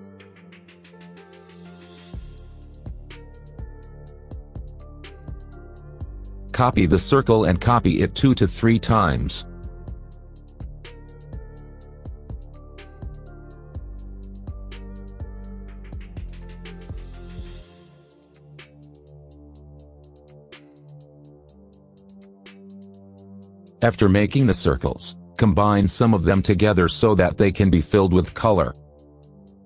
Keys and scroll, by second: 6.7 KP_Add, 10.9 KP_Add, 15.4 KP_Add, 23.3 ctrl+z.